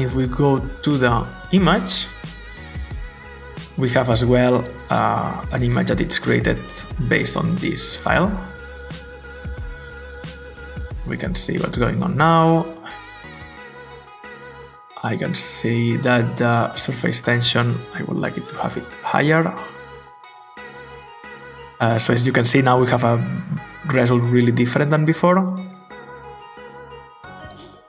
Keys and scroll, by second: 18.0 typing, 19.7-20.5 typing, 20.7 Return.